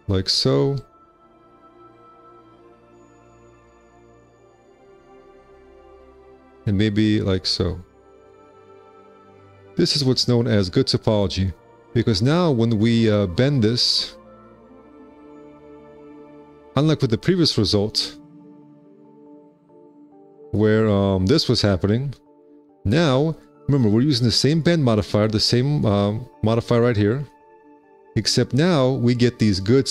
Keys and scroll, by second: 10.6 ctrl+w, 10.9 1, 16.6 F4, 17.6 F4.